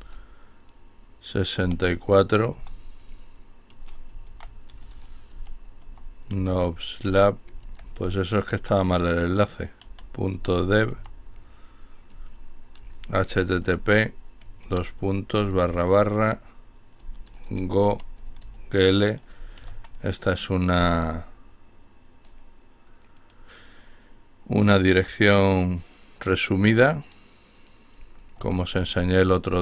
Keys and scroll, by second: 1.4-2.1 typing, 3.2-4.9 typing, 6.5-10.5 typing, 11.6-19.7 typing, 27.6-29.3 typing.